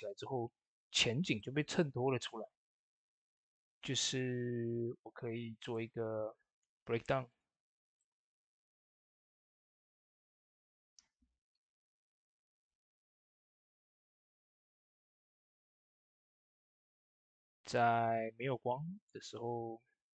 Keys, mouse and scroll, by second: 5.5 click, 8.0 scroll up 1, 8.5 click, 11.5-13.2 typing, 14.8 click, 15.6 ctrl+v, 17.2 click.